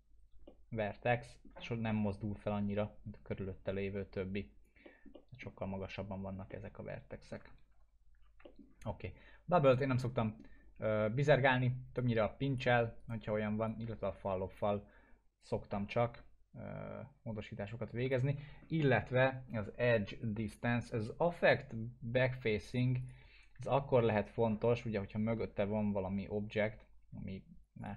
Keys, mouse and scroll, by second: 0.4-1.7 alt+middle drag, 3.6-5.4 click, 4.8 middle click, 7.7 ctrl+z, 8.4 alt+middle click, 9.6 right click, 10.2 alt+middle click, 11.9-12.6 click, 13.0 right click, 13.6-14.6 drag, 18.4 ctrl+z, 22.7 click, 23.7-25.5 alt+middle drag, 27.8 click.